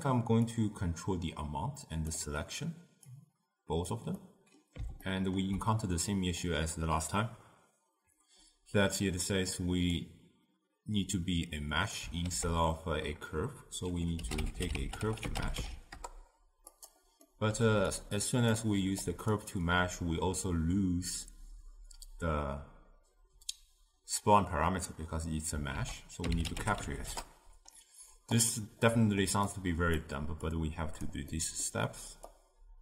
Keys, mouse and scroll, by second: 3.1 click, 4.2-8.2 middle drag, 9.6 click, 12.3 ctrl+a, 17.2-18.0 middle drag, 18.0 click, 19.1 click, 25.8 ctrl+a, 29.0-29.5 middle drag, 29.5 click, 30.5-31.4 drag, 31.4 middle click, 32.3 click.